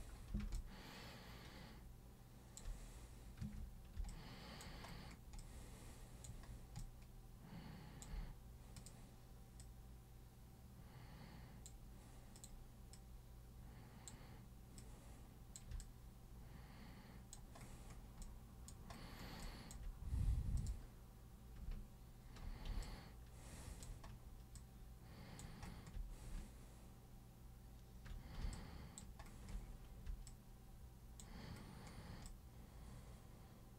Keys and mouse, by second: 0.6-2.6 alt+super+drag, 3.5 super+1, 4.1 alt+super+click, 5.4 alt+super+click, 6.8-8.0 alt+super+drag, 8.8 super+click, 9.6 super+click, 12.4 super+click, 13.0-14.1 super+drag, 14.8 super+click, 15.8-17.3 alt+super+drag, 18.2 alt+super+click, 19.4 alt+super+click, 20.6 super+click, 22.8-23.8 alt+super+drag, 24.6 alt+super+click, 28.5 alt+super+click, 30.3 alt+super+click, 32.3-33.7 alt+super+drag.